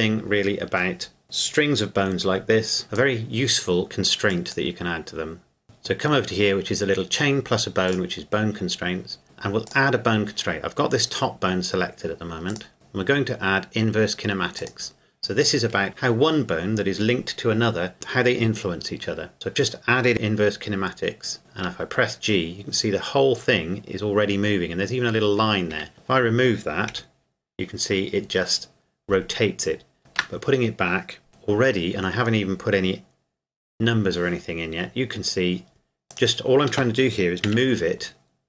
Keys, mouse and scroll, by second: 2.8 click, 7.9 click, 9.7 click, 12.5 click, 14.6 click, 21.4 g, 25.7 Escape, 25.9 click, 26.9 g, 30.0 ctrl+z, 31.3 g, 36.1 right click, 37.5 KP_1.